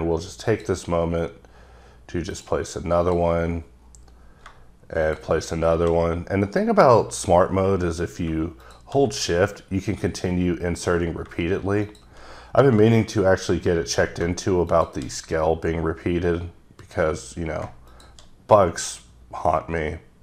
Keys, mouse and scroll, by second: 0.5 click, 1.0-2.2 scroll down 8, 2.4 click, 3.1 click, 3.5-4.4 scroll down 9, 5.1 shift+click, 5.9-8.3 shift+scroll down 16, 8.6 shift+click, 9.3-11.4 scroll down 10, 11.4-11.8 scroll down 1, 11.9 shift+click, 12.7 scroll down 3, 12.9 scroll up 4, 13.1 scroll down 1, 13.2 scroll up 2, 14.7 shift+click, 15.6-17.0 scroll down 9, 17.4 scroll down 1, 17.9 shift+click, 18.9-20.2 scroll down 10.